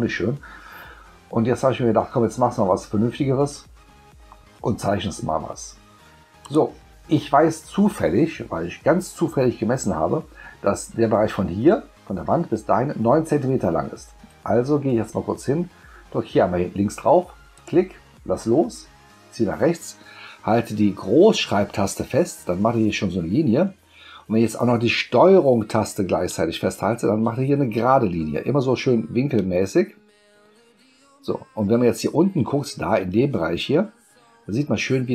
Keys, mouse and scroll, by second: 6.4 click, 17.6 click.